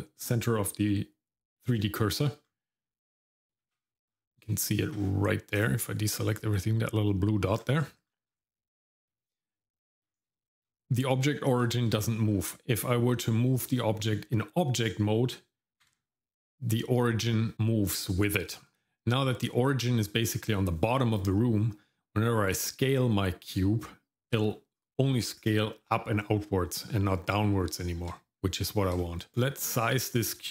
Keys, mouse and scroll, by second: 2.2-3.5 scroll down 3, 3.6 shift+z, 4.1-5.0 scroll up 2, 5.0-5.4 scroll up 1, 5.5 click, 7.6-8.8 scroll down 6, 8.6 middle click, 9.0-9.4 scroll up 1, 9.4 middle click, 9.5-10.3 scroll down 2, 10.4 shift+middle click, 10.9 Tab, 11.6 shift+middle click, 12.0 middle click, 12.3-13.1 scroll up 1, 13.1 middle click, 14.3 middle click, 15.8 g, 18.7 shift+middle click, 18.7-20.8 scroll down 1, 27.8 shift+middle click, 28.3-28.9 scroll up 1, 29.0 shift+middle click, 29.3 click, 29.3 shift+z, 30.1 shift+middle click.